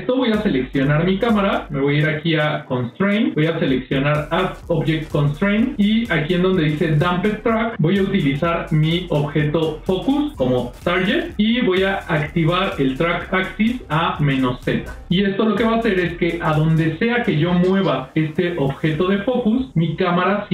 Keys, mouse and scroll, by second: 2.0 click, 9.1 click, 14.0 click, 15.8 click, 18.5 g.